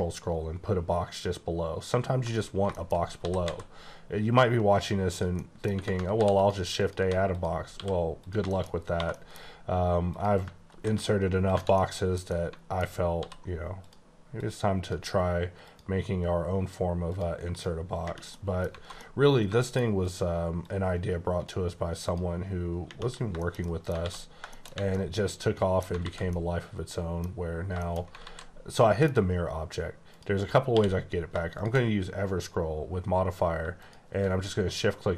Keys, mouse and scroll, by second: 0.6-2.3 ctrl+scroll down 6, 2.3 click, 2.7 shift+middle click, 3.2 typing, 5.1 click, 5.3 middle click, 5.7 Tab, 6.1 ctrl+r, 6.3 ctrl+click, 7.0 3, 7.2 click, 7.7 e, 8.2 click, 8.4 middle click, 8.7 scroll up 2, 8.9 2, 9.1 middle click, 9.4-10.1 scroll up 1, 10.1 click, 10.6 ctrl+b, 11.5 click, 11.5 Tab, 11.7 middle click, 12.3 double middle click, 12.8 alt+scroll up 2, 13.1 d, 13.8 click, 14.3 click, 15.7 click, 17.1 click, 17.5 click, 18.3 middle click, 18.6 scroll down 2, 18.8 alt+a, 19.0 middle click, 20.0 click, 20.6 click, 23.1 scroll down 2, 23.4 shift+middle click, 23.6 double middle click, 24.0 alt+x, 24.2 scroll down 2, 24.5 shift+middle click, 26.0 alt+z, 26.3 middle click, 28.2 z, 28.7 middle click, 30.1 click, 30.6 q, 31.5 shift+click, 33.8 shift+click.